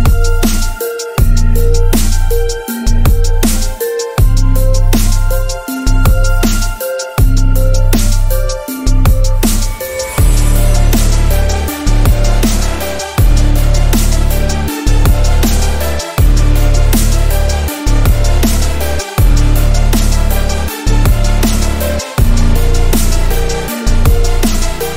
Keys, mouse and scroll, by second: 4.7 click, 5.2 alt+scroll up 1, 6.2 click, 8.4 click, 9.3 ctrl+1, 10.6 ctrl+1, 11.8 alt+scroll up 1, 12.4-13.5 alt+right click, 13.8 click, 18.0 click, 20.0 click.